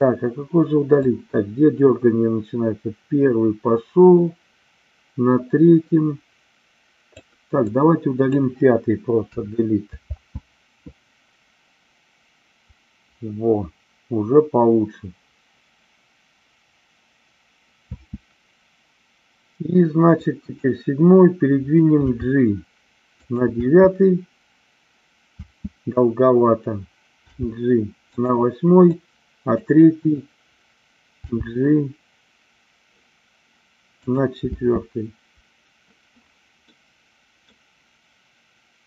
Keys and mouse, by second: 1.0-7.3 drag, 7.7-8.2 drag, 9.1 Delete, 10.0 space, 18.0 space, 20.1-20.5 drag, 22.0 g, 23.1 click, 23.5 space, 27.1 g, 28.0 click, 28.9 click, 31.2 g, 34.0 click, 34.4 space, 36.8 middle click.